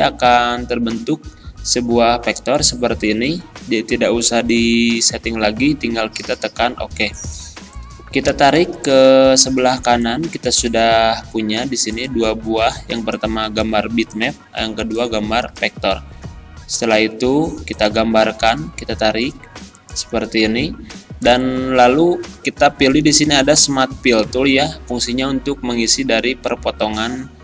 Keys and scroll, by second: 9.8 z.